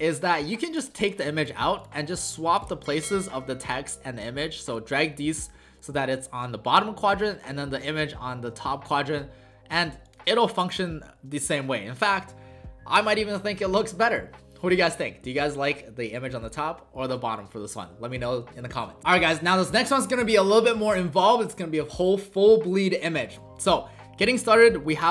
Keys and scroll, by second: 10.5 w.